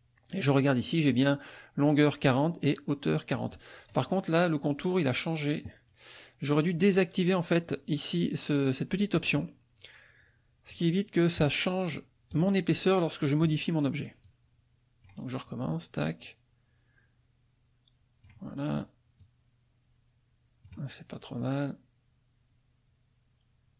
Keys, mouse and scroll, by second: 9.1 click, 10.7 right click, 12.3 click, 14.2 click, 16.0 click, 19.2 click, 21.4-23.7 drag.